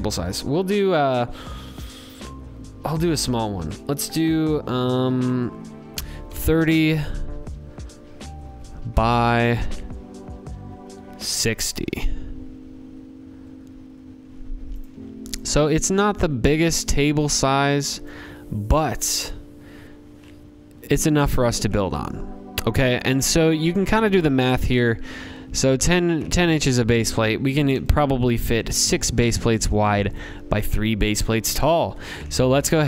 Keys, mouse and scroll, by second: 5.0-5.8 typing, 5.9 Tab, 8.5 click, 9.8-10.6 typing, 11.8-12.5 scroll, 13.1-13.6 scroll, 13.7 click, 16.9 click, 17.6 click, 19.0 scroll, 20.4 scroll, 21.1-22.0 scroll, 22.6 click, 27.1 click, 28.2 click, 29.1 click, 30.7 scroll, 31.7-32.1 scroll, 32.3 click, 32.6-32.8 scroll.